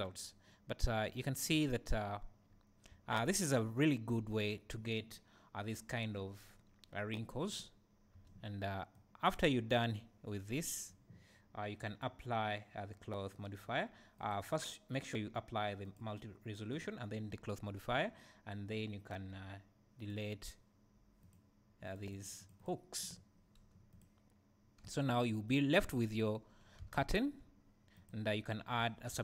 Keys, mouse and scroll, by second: 0.8-8.9 right drag, 1.5 space, 2.5-7.8 scroll up 1, 8.3 space, 8.9-9.3 drag, 9.7-14.2 right drag, 14.2-15.6 drag, 15.9 click, 20.0 click, 23.9 click, 24.9 g, 25.5 right click, 26.6 scroll up 1, 26.8 alt+a, 28.0 click.